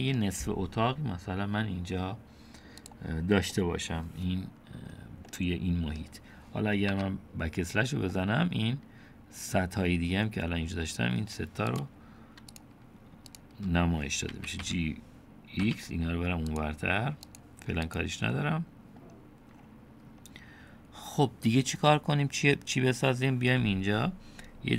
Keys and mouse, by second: 3.5 middle click, 5.3 middle click, 6.9 /, 8.1-9.6 middle drag, 11.7 click, 12.5 shift+click, 13.3 shift+click, 14.3 g, 15.7 middle click, 18.4-19.0 drag, 22.3 middle click.